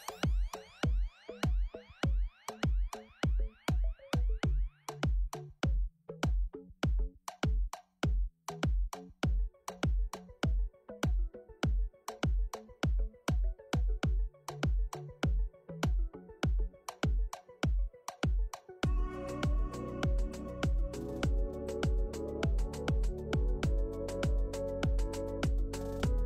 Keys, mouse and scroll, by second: 0.1 click, 0.6 click, 2.0 click, 2.3 click, 3.0 click, 3.7 click, 3.8 click.